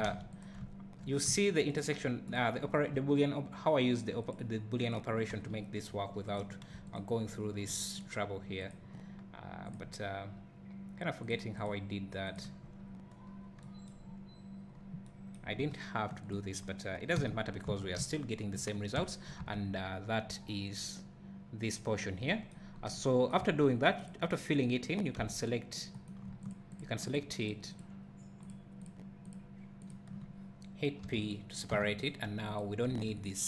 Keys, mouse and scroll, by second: 0.1 alt+a, 0.4 click, 0.6 `, 1.8 shift+click, 5.3 f, 6.4 click, 6.9 alt+click, 8.7 shift+click, 13.2-13.6 scroll up 1, 14.7-15.0 scroll up 1, 16.3 shift+click, 17.2 f, 17.5 scroll down 1, 17.7 Tab, 18.0 `, 19.4 Tab, 22.7 scroll up 1, 23.4 3, 24.0 click, 25.9 c, 26.5 shift+click, 31.3 p, 31.7 Tab, 32.0 click, 33.2 x.